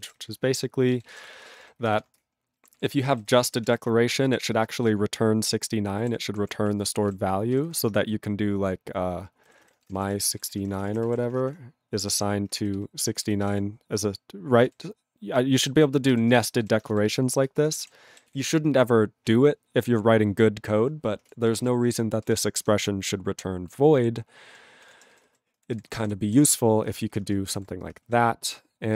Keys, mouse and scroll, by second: 2.3 ctrl+Return, 2.6 ctrl+=, 3.2 ctrl+n, 3.3 ctrl+n, 3.6 ctrl+space, 3.6 ctrl+e, 4.3 ctrl+g, 4.4 ctrl+space, 4.9 ctrl+alt+b, 6.0 ctrl+=, 6.3 ctrl+p, 6.6 ctrl+e, 6.8 ctrl+g, 7.0 ctrl+space, 7.0 ctrl+a, 7.5 ctrl+g, 7.6 ctrl+n, 9.2-12.1 typing, 12.7 ctrl+b, 13.1 ctrl+f, 13.2 ctrl+f, 13.4 ctrl+space, 13.5 ctrl+e, 15.5 alt+b, 15.6 alt+b, 16.2 ctrl+g, 16.3 ctrl+space, 16.3 ctrl+e, 16.6 ctrl+g, 17.0 alt+b, 17.6 ctrl+space, 17.8 ctrl+w, 18.3 ctrl+s, 21.8 ctrl+s, 22.2 ctrl+space, 22.3 ctrl+e, 22.6 ctrl+g, 24.8 ctrl+space, 24.8 ctrl+a, 25.1 ctrl+g, 25.2 ctrl+n, 25.7 ctrl+s, 25.9 ctrl+space, 25.9 ctrl+e, 26.0 ctrl+g, 26.4 ctrl+s, 26.8-28.1 typing, 28.1 ctrl+a, 28.9 ctrl+g.